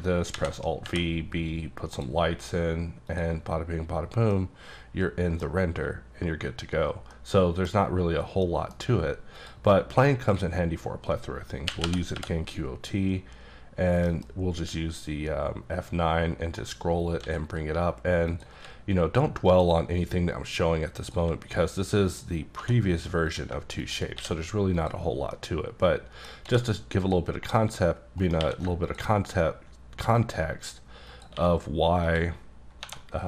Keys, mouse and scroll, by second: 0.3 alt+v, 0.8 b, 1.2-1.9 scroll up 2, 1.9 click, 3.1 click, 4.3 middle click, 5.6-6.7 scroll up 4, 6.7-7.1 scroll down 1, 7.1 middle click, 8.4 middle click, 9.3 click, 10.2 click, 11.7 q, 11.8 o, 12.1 t, 14.1 F9, 15.4-16.7 ctrl+scroll up 2, 16.7-17.2 scroll up 3, 17.2 s, 18.3 click, 18.5 q, 19.4 click, 20.3-20.8 scroll up 5, 21.0 click, 21.1 q, 22.0 click, 22.6 2, 23.2 click, 24.1 click, 24.1 q, 24.7 click, 25.3 middle click, 25.4 scroll up 1, 26.4 q, 27.0 click, 28.2 right click, 28.4 q, 28.8 ctrl+click, 31.1 click, 31.3 q, 32.0 click, 32.8-33.2 typing.